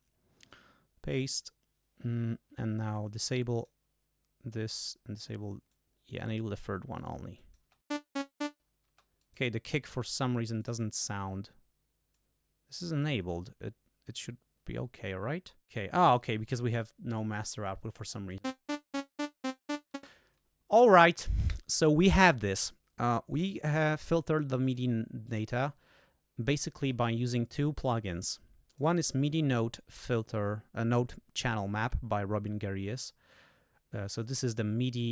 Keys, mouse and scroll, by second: 1.1 click, 2.9 click, 5.7 click, 7.0 click, 7.4 click, 7.6 space, 8.9 space, 10.1 click, 10.6 click, 12.1-13.2 drag, 13.3 click, 16.1 click, 17.1 click, 18.4 space, 19.9 space, 24.7 click, 28.7 click.